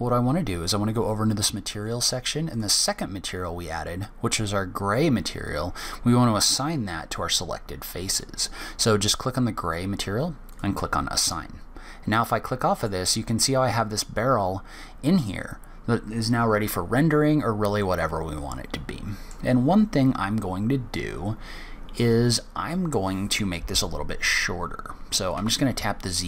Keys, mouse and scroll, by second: 2.3 click, 10.3 click, 11.0 click, 11.7 scroll down 1, 12.2 middle click, 12.9-14.0 scroll up 1, 17.6 middle click, 25.1 z.